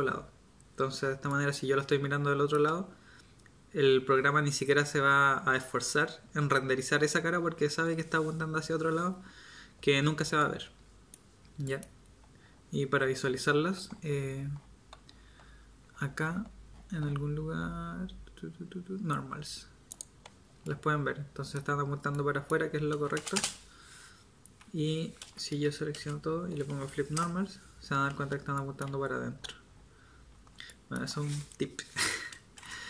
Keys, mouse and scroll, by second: 23.1 space, 25.2 a, 25.9 space, 28.9 z, 30.3 z, 32.5 space.